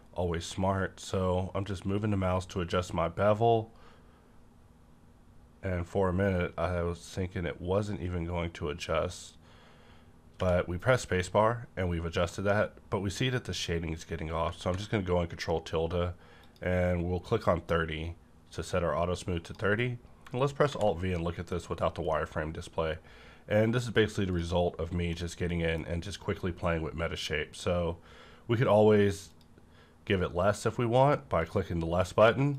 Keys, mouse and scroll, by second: 9.0 click, 11.8-12.2 scroll down 1, 12.2 middle click, 12.6-12.9 scroll up 1, 16.3 click, 19.1 scroll down 1, 19.3 click, 19.6 scroll down 1, 20.7 alt+v, 21.4 click, 21.8 scroll down 1, 22.1-25.0 middle drag, 24.3 click, 25.0 scroll up 1, 25.1-29.3 middle drag, 29.3 click, 29.3 click, 29.3-31.4 middle drag, 31.4 click.